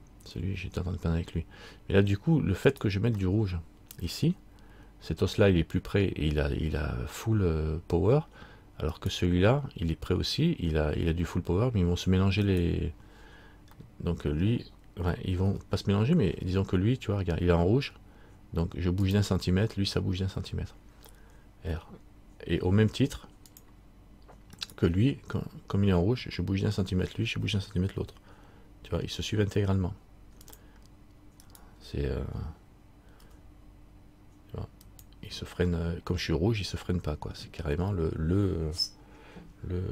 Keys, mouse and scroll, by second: 3.4 middle click, 9.2 right click, 13.9 right click, 13.9 middle click, 15.6 r, 24.8 right click, 28.1 r, 31.6 right click, 33.4 r.